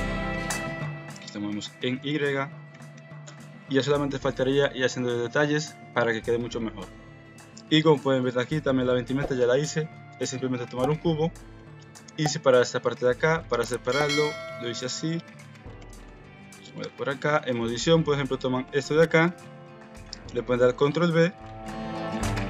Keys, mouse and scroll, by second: 0.3 g, 2.7 KP_1, 2.9 Tab, 4.5 shift+click, 8.1 click, 8.7 KP_Decimal, 11.4 middle click, 13.1 shift+a, 15.7 g, 16.8 Tab, 17.5 middle click, 18.7 2, 20.7 ctrl+b.